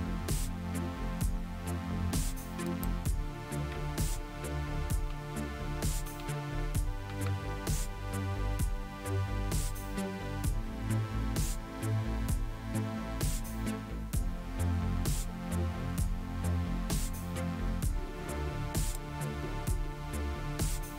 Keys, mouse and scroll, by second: 2.7 click, 5.1 Page_Down, 5.3 Down, 6.0 Down, 7.1 End, 7.3 Down, 18.8 click.